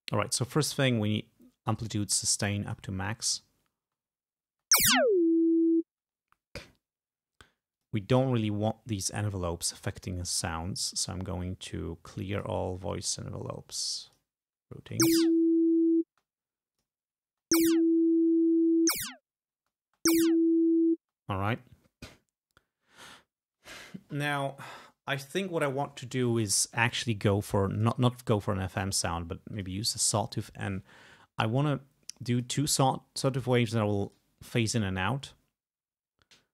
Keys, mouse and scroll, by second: 1.9-3.0 drag, 3.9 space, 4.5 space, 5.9 space, 7.8 click, 10.0 right click, 12.4 click, 13.1 right click, 14.1 click, 14.8 space, 16.2 space, 16.8 click, 17.3 space, 19.6 space, 21.1 space, 27.8 click, 29.6 click, 32.4 click, 34.1 click.